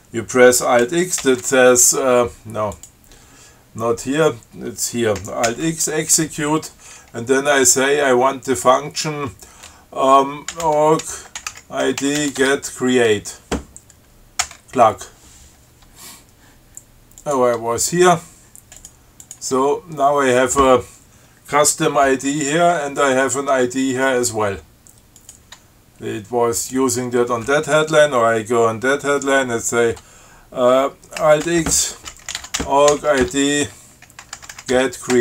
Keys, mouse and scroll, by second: 1.4 alt+x, 3.0 click, 5.7 alt+x, 10.5-12.9 typing, 14.7 Return, 17.4 click, 17.8 Tab, 19.1 click, 19.5 click, 19.8 Tab, 25.4 click, 25.8 Tab, 26.8 click, 31.7 alt+x, 32.3-35.2 typing.